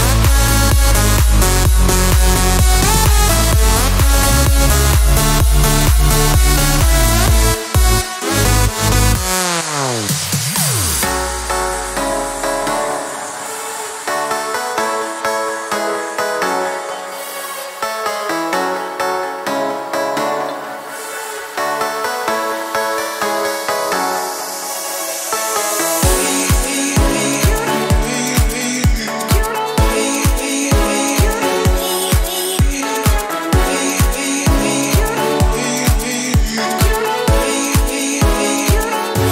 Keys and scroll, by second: 4.0 2, 4.6 Return, 10.6 2, 11.0 Return, 31.2-33.0 typing, 34.1 Return, 38.2 Escape.